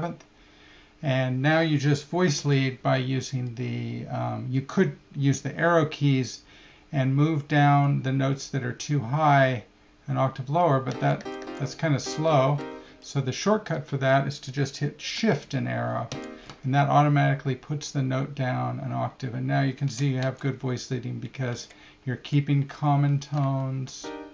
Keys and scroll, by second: 10.9 Down, 12.0 Up, 16.1 shift+Down, 20.2 Left, 21.5 Right, 22.1 Left, 22.7 Right, 23.1 Left, 24.0 shift+Up.